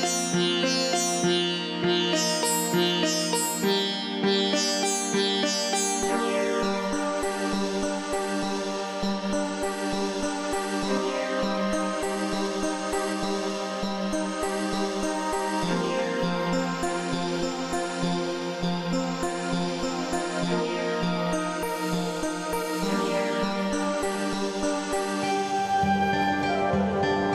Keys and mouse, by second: 0.2 click, 3.1 click, 4.7 click, 6.3 click, 7.7 click, 8.8 click, 10.0 click, 11.0 KP_Subtract, 11.7 click, 12.9 click, 14.0 click, 15.5 click, 16.4 click, 17.4 click, 19.2 click, 20.5 click, 22.6 click, 25.1 click, 26.6 click.